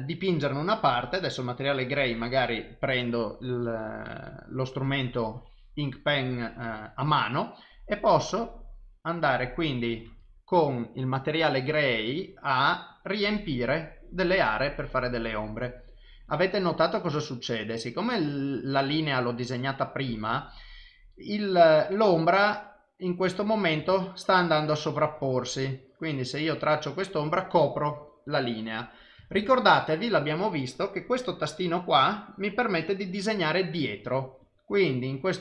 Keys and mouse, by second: 1.4 click, 8.2 click, 10.1 ctrl+z, 13.0 click, 24.0 ctrl+z, 24.7 click, 29.4 ctrl+z, 32.8 click, 34.5 click.